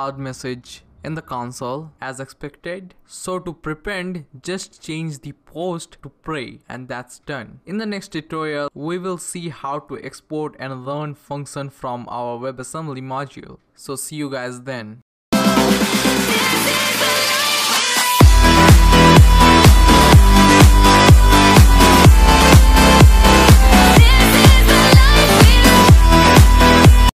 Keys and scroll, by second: 0.2 Return.